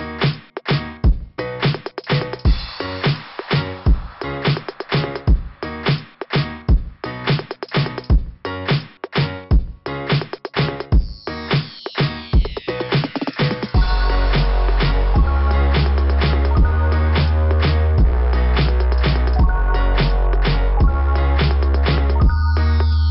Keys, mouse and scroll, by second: 11.1 click, 11.5 click, 11.8 click, 12.1 click, 12.4 click, 12.7 click, 13.1 click, 13.4 click, 13.6 click, 13.8 click, 14.0 click, 14.1 click, 15.8 scroll up 4, 20.4 click, 20.4 click.